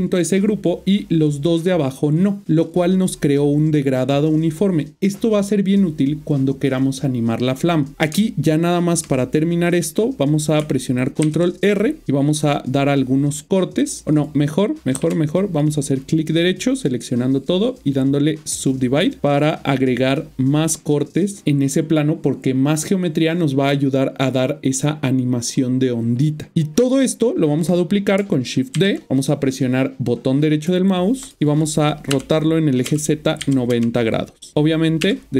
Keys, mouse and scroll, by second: 8.1 Tab, 11.2 ctrl+r, 12.0-12.4 scroll up 6, 14.1 right click, 14.9 a, 15.5 right click, 18.5 click, 31.2 right click, 32.1-33.8 typing.